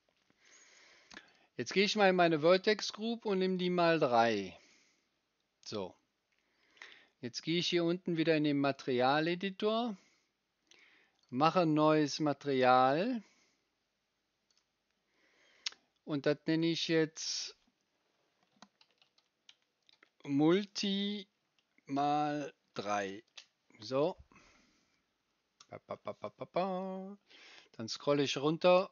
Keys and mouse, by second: 1.2 middle click, 1.4-2.5 right drag, 3.5-4.7 right drag, 8.7-11.2 right drag, 18.6 shift+middle click, 21.4-22.4 shift+middle drag, 25.6-28.9 right drag.